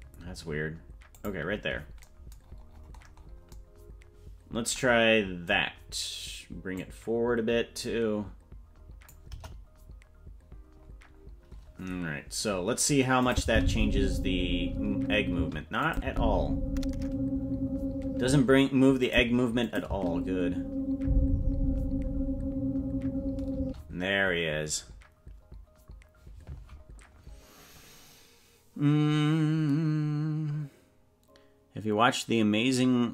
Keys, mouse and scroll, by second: 2.4-3.5 scroll down 20, 6.8-9.1 drag, 9.3 KP_0, 12.3-12.6 scroll up 3, 13.2 click, 13.4 space, 15.4 space, 15.8 click, 16.0 space, 18.3 space, 19.0 click, 19.6 click, 19.9 space, 23.6 space.